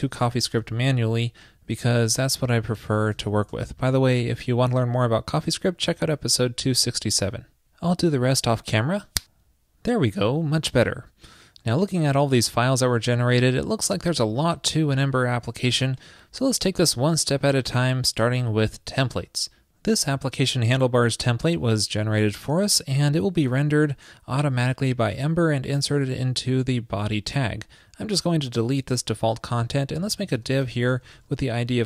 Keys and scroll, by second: 30.0 ctrl+shift+<.